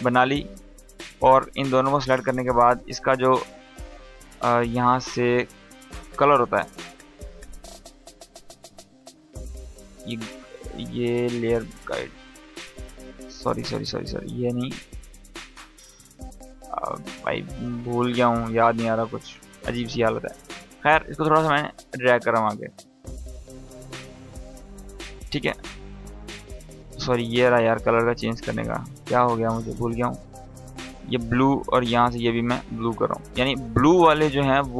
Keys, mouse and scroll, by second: 1.1 ctrl+click, 1.4 right click, 11.0 click, 12.5 ctrl+z, 13.2 right click, 17.1 click, 18.6-22.4 ctrl+drag, 20.0-20.6 click, 22.4 =, 23.6-24.2 drag, 27.2-34.7 drag.